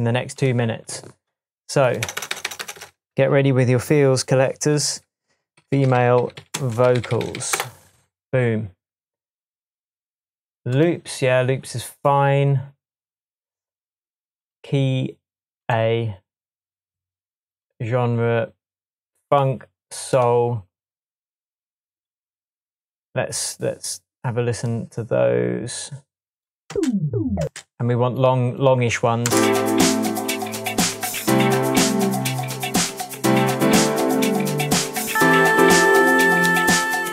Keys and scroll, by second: 2.0 BackSpace, 2.1 BackSpace, 5.5-7.6 typing, 26.7 space, 28.1 space, 29.2 space.